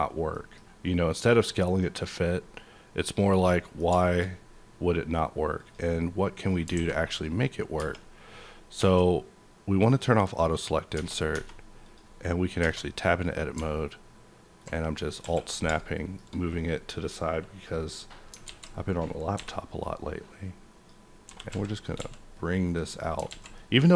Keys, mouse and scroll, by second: 0.3 middle click, 0.6-1.3 scroll up 1, 1.3-3.1 scroll down 2, 1.6 middle click, 3.1 click, 3.5 middle click, 3.5 click, 4.0 shift+middle click, 4.2-5.3 shift+scroll up 1, 5.3-5.7 shift+scroll up 2, 5.5 click, 6.4 click, 6.7 alt+a, 7.1 click, 7.6 scroll down 1, 7.7 Tab, 8.8 Tab, 9.9 click, 10.5 click, 10.9 Tab, 10.9-11.3 scroll down 1, 11.8 click, 12.6 Tab, 12.7 scroll down 1, 13.0 middle click, 13.3 middle click, 13.3-14.0 scroll down 1, 14.6 alt+scroll up 1, 15.2 KP_5, 15.9 middle click, 16.2 shift+scroll up 1, 16.9-17.2 scroll down 1, 17.4-18.3 scroll down 1, 18.4 alt+z, 19.1 scroll up 1, 19.3 b, 19.8-22.9 drag, 21.2 g, 21.5 y, 22.0 x, 23.3 alt+z, 23.5 middle click.